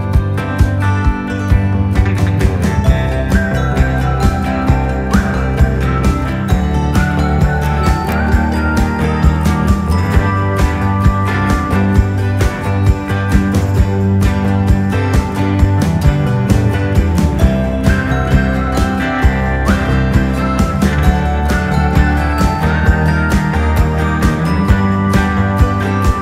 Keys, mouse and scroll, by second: 0.0 ctrl+-, 0.9-1.8 typing, 1.3 click, 4.6 typing, 5.1 shift+click, 8.0 click, 8.9 typing, 9.0 click, 11.3 Down, 11.3 typing, 16.5 Right, 17.1 Down, 20.4 Right, 22.5 click, 23.9 click, 25.5 click, 25.5-26.2 typing.